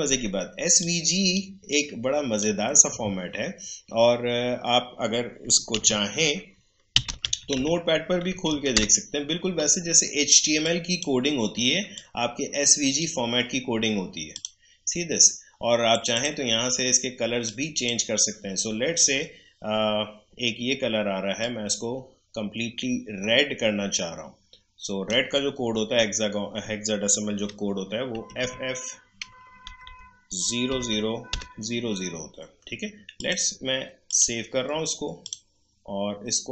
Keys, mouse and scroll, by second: 0.8-5.0 drag, 5.4 click, 5.7 super+r, 6.7-8.0 typing, 8.4 Down, 8.7 Return, 10.6-20.4 drag, 21.4-27.4 drag, 28.1 typing, 29.6 Delete, 30.7-31.3 typing, 33.2 click.